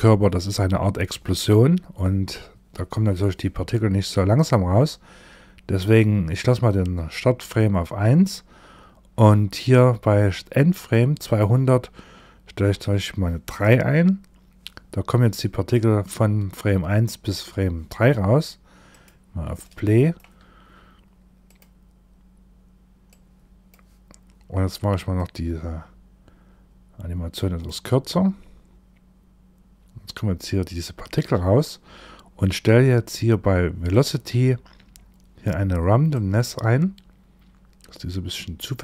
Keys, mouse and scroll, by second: 10.7 click, 18.4 click, 19.1 shift+middle click, 20.9 click, 22.6 click, 24.6 click, 33.4 click, 33.8-35.6 scroll down 6, 35.6 click, 35.6-37.0 scroll down 2.